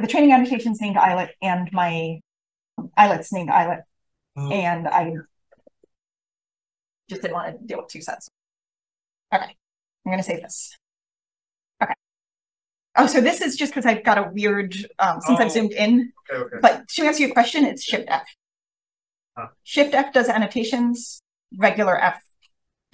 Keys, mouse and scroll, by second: 8.8 click, 8.8-9.7 scroll up 1, 9.7-10.3 super+scroll up 1, 9.8 super+s, 10.7-11.1 drag, 12.9-14.0 scroll up 1, 14.1-15.7 right drag, 15.6-16.9 scroll up 2, 16.2 drag, 16.9 drag, 17.2-17.8 scroll up 1, 17.8-18.4 ctrl+scroll up 1, 18.4-18.8 scroll up 1, 18.8 click, 18.8 shift+f, 20.0 shift+f, 21.4 f, 21.8 f.